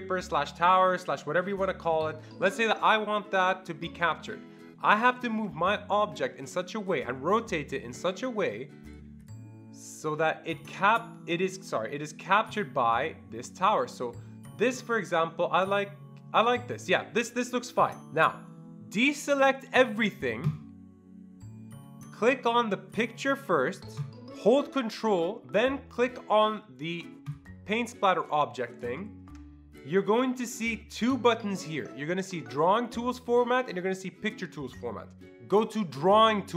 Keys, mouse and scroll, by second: 5.2-18.0 drag, 20.4-23.2 drag, 24.0-27.3 drag.